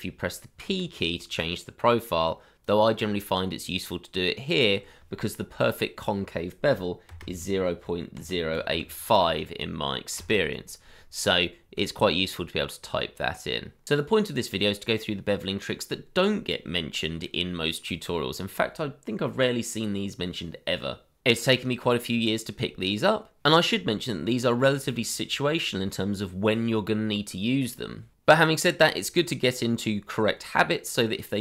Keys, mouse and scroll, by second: 0.6 p, 7.1-8.7 typing, 10.1 KP_Enter.